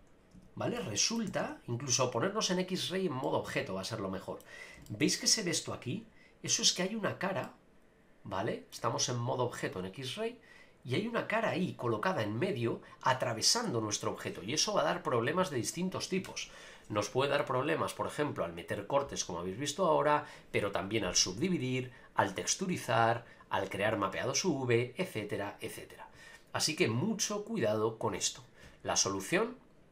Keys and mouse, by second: 0.4 Tab, 0.7-1.2 middle drag, 1.3 a, 1.4 a, 2.1-3.2 drag, 3.2-4.4 middle drag, 4.8 shift+middle drag, 7.4-8.7 middle drag, 29.5 click.